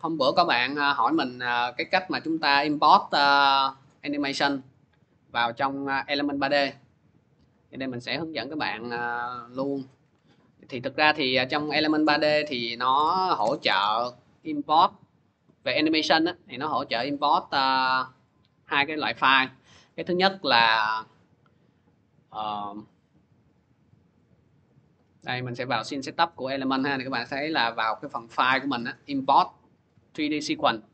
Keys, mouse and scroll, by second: 7.2 click, 8.3 click, 10.9 scroll, 12.7 click, 13.3 ctrl+y, 13.3 middle click, 13.5 Return, 15.5 click, 15.9 scroll, 18.0 click, 19.2 click, 19.4 click, 24.6 click, 28.1 click, 30.4 click.